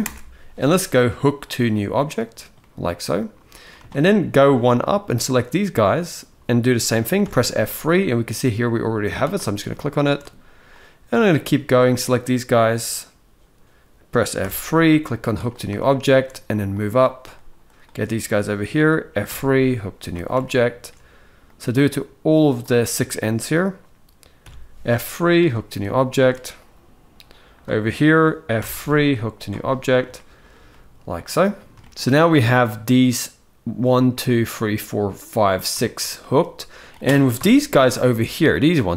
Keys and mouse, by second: 2.3-3.3 middle drag, 3.6 shift+middle click, 4.6-5.7 drag, 7.0 F3, 9.4 shift+middle click, 10.5-11.6 drag, 14.2 F3, 15.5 shift+middle click, 16.6-17.6 drag, 19.0 F3, 20.1 shift+middle click, 21.3-22.3 drag, 24.1 F3, 25.5 shift+middle click, 26.3-27.3 drag, 28.3 F3, 29.8 shift+middle click, 30.4-31.5 middle drag, 31.7 ctrl+z, 31.7 alt+a, 31.9 middle click, 35.5 shift+middle click, 36.1 middle click, 37.1 KP_7, 38.2 click.